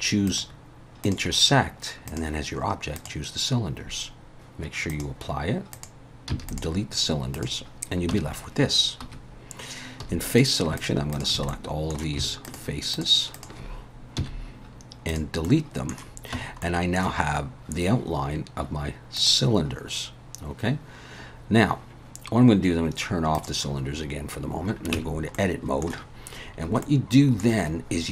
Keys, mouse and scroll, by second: 0.3 click, 2.1 click, 4.3 ctrl+z, 4.9 click, 5.7 click, 6.3 x, 7.3 click, 8.1 Tab, 9.0 2, 10.0 3, 10.3 click, 10.8 shift+click, 11.1 click, 11.5 middle click, 12.4 shift+click, 12.9 shift+click, 13.3 shift+click, 14.2 x, 15.5 middle click, 16.3 Tab, 16.6 middle click, 19.2 click, 23.4 click, 24.9 Tab, 25.3 middle click, 26.6 scroll up 2, 26.8 middle click.